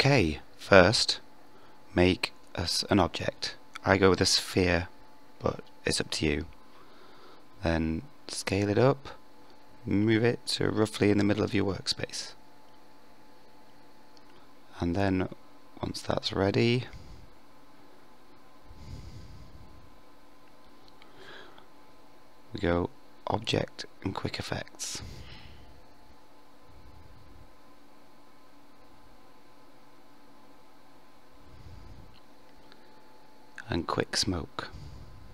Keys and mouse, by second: 3.0 s, 5.8 click, 7.1-8.6 drag, 9.6 g, 11.0 KP_1, 12.3 KP_5, 15.0 g, 18.2-19.7 middle drag, 22.7 ctrl+a, 24.5 shift+drag, 26.1-26.4 middle drag, 26.7 shift+middle drag, 27.5 KP_5, 29.1-30.3 middle drag, 30.3-35.3 drag.